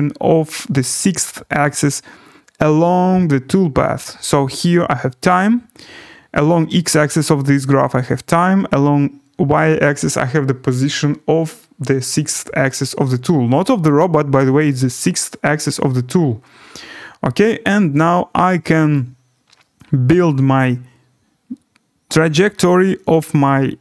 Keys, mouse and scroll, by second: 18.9 click.